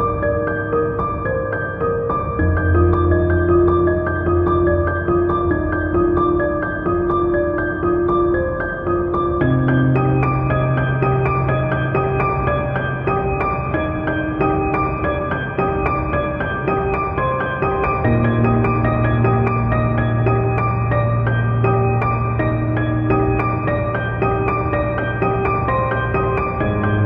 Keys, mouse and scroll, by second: 0.3 alt+click, 0.4 scroll down 2, 0.6-3.7 typing, 1.0 click, 1.1-2.7 middle drag, 1.4-2.1 scroll up 4, 2.1 Escape, 2.2 scroll down 2, 2.5-3.1 scroll up 4, 2.7 click, 2.8 shift+middle click, 3.5 click, 3.7-4.4 middle drag, 3.7 scroll down 1, 4.4 drag, 4.8 click, 4.9-5.4 shift+middle drag, 4.9 KP_1, 5.4 click, 5.6 click, 5.7 KP_3, 5.8 z, 5.9 shift+middle click, 6.2 scroll down 2, 6.2-8.4 drag, 6.6 ctrl+a, 7.5 scroll up 2, 8.2 scroll down 2, 8.4 middle click, 9.0 click, 9.2 middle click, 9.4 click, 9.5 scroll down 2, 9.6 KP_3, 9.7-10.4 scroll up 4, 9.8 shift+middle drag, 10.4 click, 10.7 scroll down 2, 10.7 shift+middle click, 10.9 scroll up 2, 11.1 scroll down 1, 11.2 scroll up 1, 11.4 scroll down 2, 11.5 z, 11.6 shift+middle click, 11.9 scroll up 1, 12.1 shift+middle click, 12.4-14.2 shift+drag, 12.7 scroll down 2, 12.8 KP_7, 12.9 Tab, 14.2 middle click, 14.6 Escape, 14.8 KP_7, 14.9-18.8 shift+middle drag, 15.0 scroll up 2, 15.1 k, 15.6 KP_7, 15.8 k, 18.4 Return, 18.7-21.3 typing, 18.8 click, 19.3-22.9 middle drag, 19.6-20.3 scroll down 2, 20.5 click, 20.5 scroll up 2, 21.1 scroll up 2, 21.5 click, 22.7 click, 22.9 scroll down 1, 23.0-23.9 middle drag, 23.5 KP_1, 23.6 scroll down 1, 23.9 click, 23.9 scroll up 1, 24.2 click, 24.8 click, 24.9 middle click, 25.1 scroll up 1, 25.3 click, 25.8-26.4 scroll down 2, 25.9-27.0 middle drag, 26.4 scroll up 1, 26.6 scroll down 1, 26.7 s.